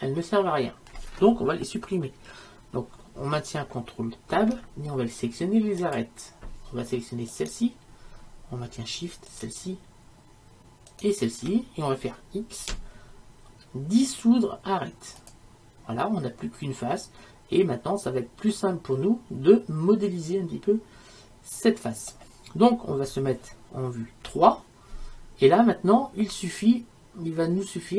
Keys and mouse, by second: 4.4 ctrl+Tab, 7.4-13.0 right drag, 12.7 x, 17.0-20.6 middle drag, 24.4 KP_3.